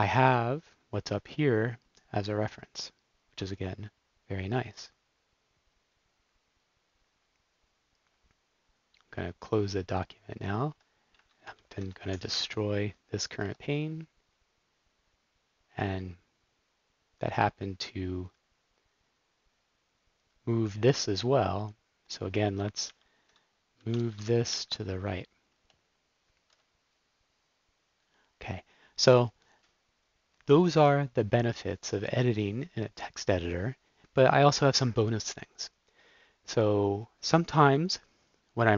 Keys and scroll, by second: 9.5 super+w, 11.4 shift+super+p, 11.8-13.3 typing, 22.8 shift+super+p, 23.6-24.9 typing, 25.5 Return, 28.1 typing.